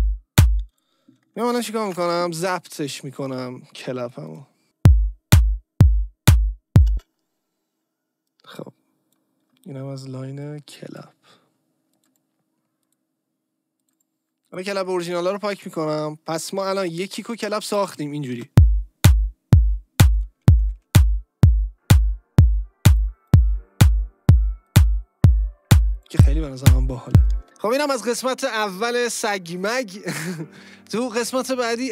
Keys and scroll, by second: 0.6 space, 1.9 ctrl+t, 4.6 space, 6.9 space, 18.4 space, 20.6 Down, 27.3 space.